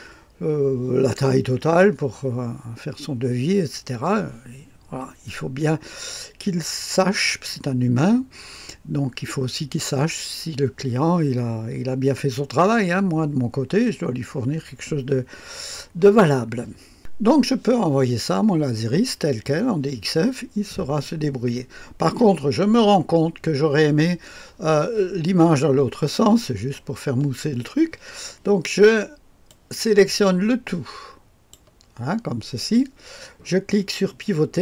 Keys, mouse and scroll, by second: 16.9 click, 29.4-32.0 drag, 34.5 click.